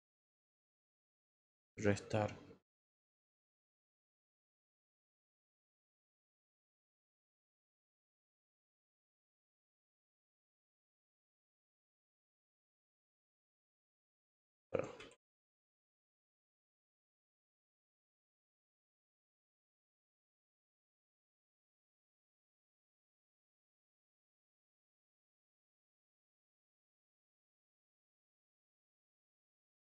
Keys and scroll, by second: 14.9 ctrl+j, 17.3 ctrl+j, 22.7 ctrl+z, 23.2 ctrl+z, 28.3 ctrl+z.